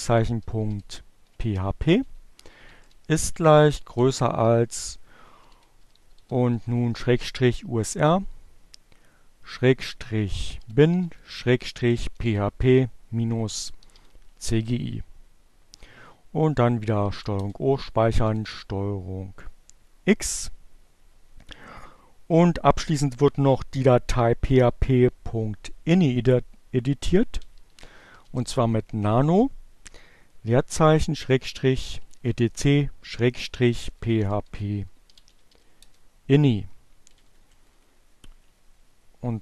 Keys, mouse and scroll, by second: 1.0-2.0 typing, 3.5-5.5 typing, 8.5-12.6 typing, 14.2 ctrl+o, 16.2 ctrl+Return, 16.8 ctrl+x, 26.1-27.6 typing, 29.1-34.9 typing, 35.5 Page_Down.